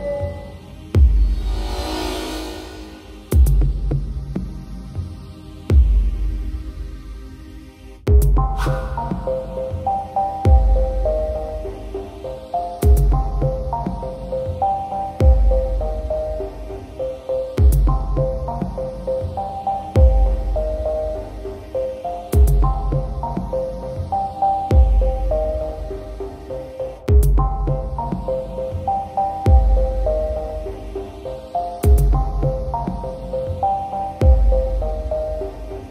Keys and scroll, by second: 1.6 typing, 7.6 alt+space, 10.2 alt+space, 12.4 alt+space, 14.0 alt+space, 18.2 alt+space, 21.6 ctrl+alt+0, 29.2 ctrl+j.